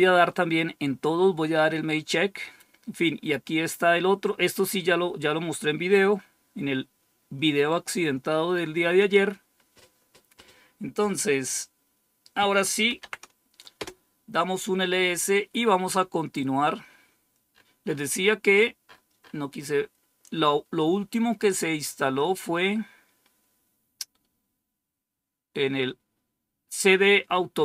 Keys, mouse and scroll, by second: 1.7-2.9 scroll down 2, 3.4-4.1 scroll down 2, 4.6-5.2 scroll down 2, 5.2 scroll down 1, 5.8-7.0 scroll down 2, 8.9 click, 12.5-13.4 typing, 13.7 Return, 17.4 scroll up 1, 19.5-20.2 scroll down 1.